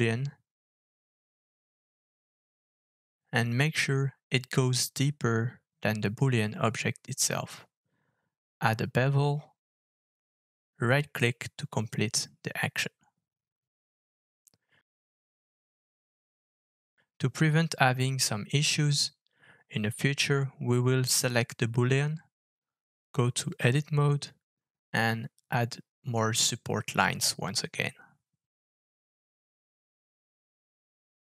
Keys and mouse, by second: 0.1 KP_7, 5.9-18.1 middle drag, 10.8 KP_7, 19.1 middle click, 20.0 middle click, 23.0 click, 23.3 click, 23.9 Tab, 25.0 ctrl+r, 27.1 Tab, 28.9 alt+f.